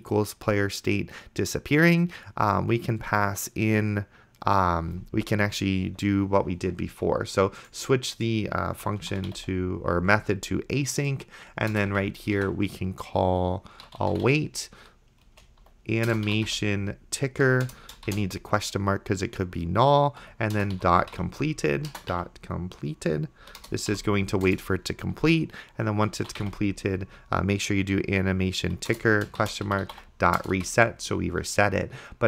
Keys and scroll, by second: 8.6-10.0 typing, 11.8 Return, 11.9 Tab, 13.5-17.0 typing, 17.5 Down, 17.7 Return, 18.5 shift+/, 20.3-22.2 typing, 23.4 Down, 23.7 Return, 23.9 ;, 24.5 Return, 25.9-27.2 typing, 28.7 Down, 29.0 Return, 29.5-30.6 typing.